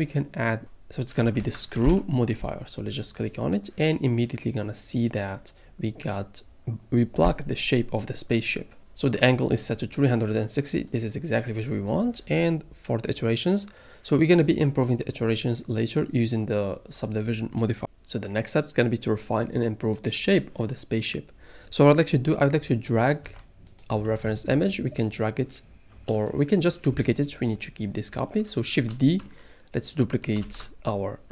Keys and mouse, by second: 0.6-3.3 drag, 15.9-17.3 middle drag, 23.2 n, 23.7 click, 30.4 shift+d.